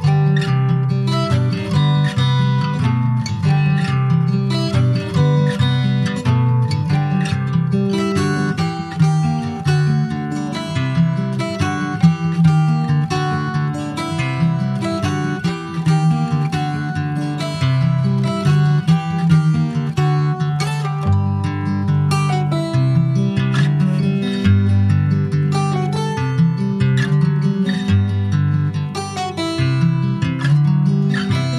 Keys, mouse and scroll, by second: 0.2-0.7 scroll up 7, 0.7 shift+middle click, 1.2 alt+z, 1.8-2.1 scroll up 2, 2.2-3.4 shift+middle drag, 3.4 2, 3.8 click, 4.4 1, 4.8 click, 5.2 click, 7.0 g, 8.8 click, 9.4 g, 11.9 click, 12.8 g, 15.2 click, 15.5 g, 17.0 click, 17.4 g, 19.9 click, 20.5 g, 22.4 click, 23.3 g, 25.0 click, 25.5 g, 26.5 click, 27.0 g, 29.2 click, 29.6 g.